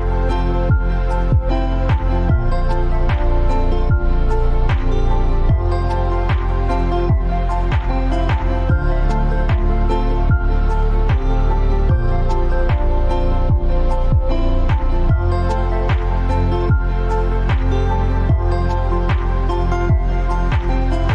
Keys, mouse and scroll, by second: 4.2-20.4 drag.